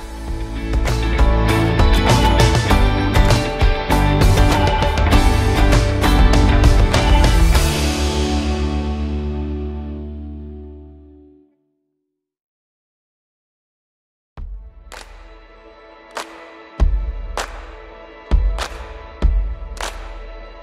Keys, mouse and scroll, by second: 0.0-1.3 typing, 1.6-2.2 scroll down 1, 2.4-3.7 alt+drag, 4.6 r, 5.1-6.0 drag, 9.0-9.7 click, 9.8-10.4 scroll up 1, 10.4-11.8 scroll down 1, 13.3 click, 16.0 w, 17.5 click, 17.9 w, 18.4-20.6 drag.